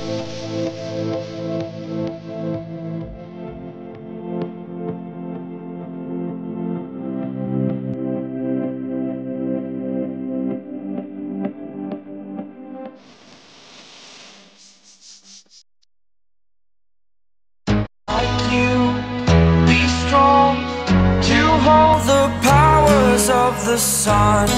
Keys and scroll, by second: 1.7 a, 14.9 v.